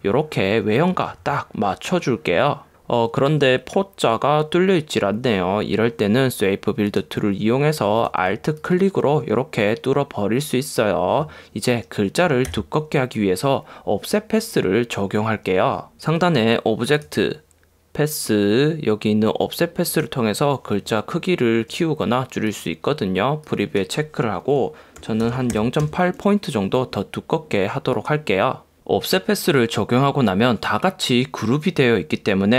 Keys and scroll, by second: 12.7 v, 25.1 0.